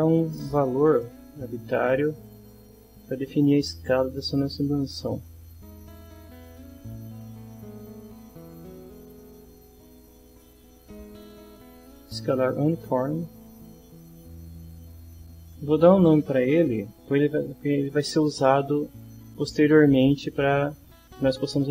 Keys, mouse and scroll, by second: 1.0 middle click, 1.6 middle click, 5.4 right click, 12.6 click, 14.0 click, 15.5 click, 16.0 click.